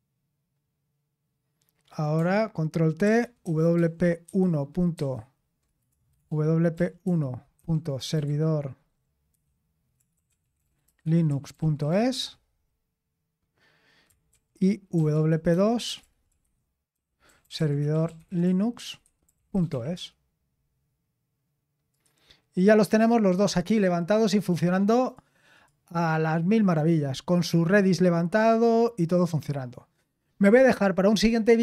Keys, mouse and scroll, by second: 1.9 click, 3.0 ctrl+t, 3.1-12.4 typing, 14.3 ctrl+t, 14.7-20.4 typing.